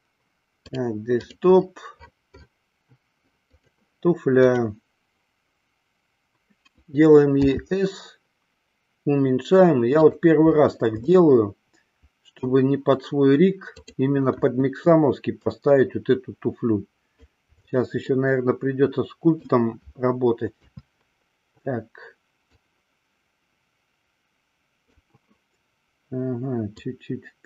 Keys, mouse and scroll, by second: 7.6 s, 10.3 click, 11.3-12.6 middle drag, 13.9 click, 14.5 KP_1, 15.6-17.5 drag, 18.4-19.8 middle drag, 20.8 KP_3, 22.6-25.1 drag, 26.9-27.4 drag.